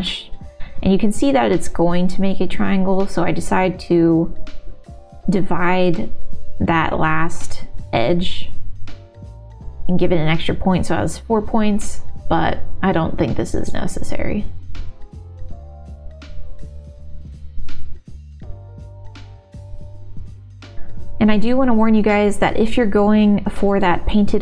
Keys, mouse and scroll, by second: 3.1 middle click, 4.4 f, 6.5 middle click, 7.6 g, 8.4 click, 9.3 middle click, 9.7 shift+click, 10.2 f, 10.5 click, 10.6 middle click, 11.0 e, 13.9 f, 14.2 middle click, 14.7 middle click, 15.5 middle click, 15.6 f, 16.2 middle click, 16.4 g, 16.9 middle click, 17.7 click, 18.1 shift+click, 18.8 shift+g, 19.3 f, 20.0 ctrl+s, 20.0 middle click, 20.5 middle click, 21.2 shift+middle click, 23.1 g, 23.8 ctrl+r, 24.3 middle click.